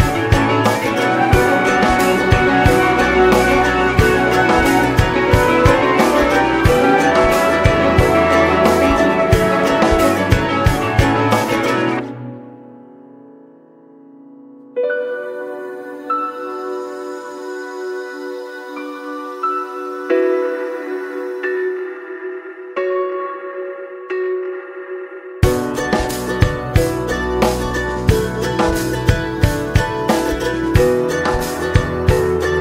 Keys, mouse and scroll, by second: 1.0 space, 1.5 middle click, 1.7-4.0 scroll up 1, 4.8-6.3 middle drag, 6.3 click, 6.5 middle click, 7.1-10.5 drag, 10.5-13.6 scroll up 1, 19.5 scroll down 2, 23.9 middle click, 24.4 ctrl+s, 26.3-30.4 drag, 30.4 scroll up 1, 30.9-32.2 middle drag, 32.2 click.